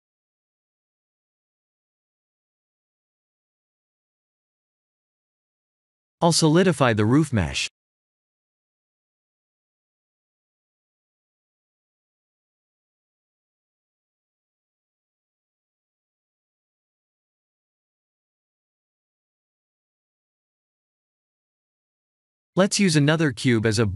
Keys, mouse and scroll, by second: 0.8 3, 0.9 click, 1.5 middle click, 3.1 e, 4.5 z, 6.8 click, 7.4 ctrl+z, 8.2 Tab, 9.7 click, 18.3 shift+z, 18.7 middle click.